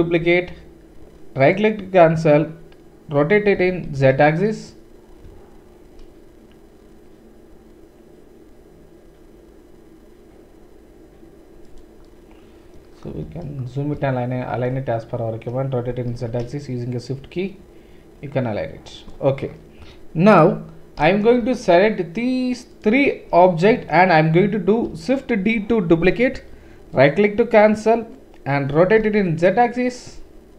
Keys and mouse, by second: 2.5-22.7 middle drag, 3.5 r, 15.9 r, 22.7 shift+click, 22.8-25.9 shift+middle drag, 23.7 KP_7, 26.2 shift+d, 28.7 r.